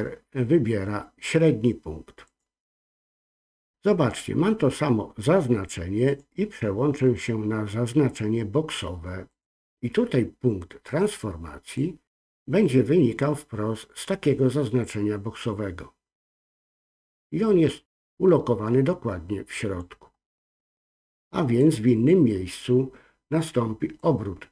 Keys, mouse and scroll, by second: 6.0-9.4 drag, 11.7-19.7 drag, 21.5-22.9 drag, 23.9-24.5 drag.